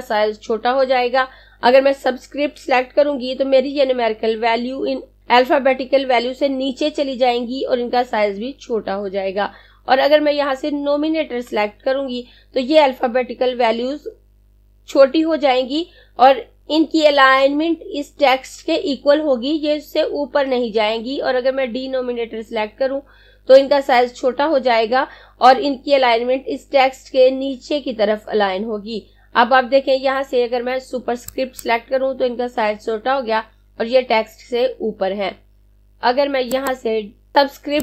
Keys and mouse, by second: 35.9 click.